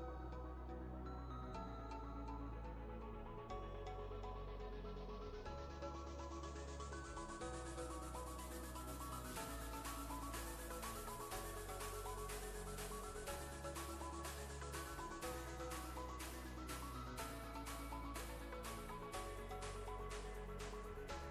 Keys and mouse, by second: 1.0 space, 1.1-2.7 click, 5.0 right click, 8.2 click, 10.1 ctrl+z, 10.9 click, 11.6-12.8 alt+drag, 14.8 right click, 15.7 click, 16.9 ctrl+space, 17.0-19.5 ctrl+click, 17.4 ctrl+space, 18.5 click, 18.6 space, 19.4 ctrl+space, 19.5 ctrl+click, 20.6-21.3 ctrl+space.